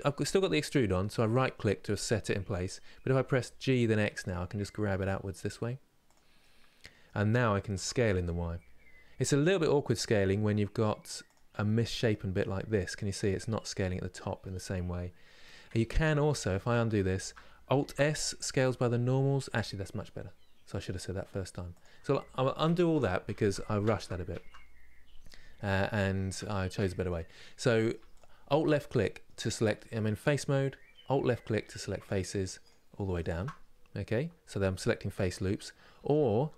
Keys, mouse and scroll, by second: 2.8 g, 6.1-7.5 middle drag, 7.5 s, 11.2-13.5 middle drag, 13.5-14.1 scroll up 3, 14.1-15.7 middle drag, 15.7 ctrl+z, 15.9 ctrl+z, 16.7 shift+middle click, 17.6 alt+s, 21.9 ctrl+z, 22.3 ctrl+z, 24.9-25.2 scroll down 1, 25.2 middle click, 25.8 scroll down 1, 26.2-27.8 shift+middle drag, 27.8 alt+click, 28.6-31.7 middle drag, 31.7 alt+shift+click, 32.3 alt+shift+click.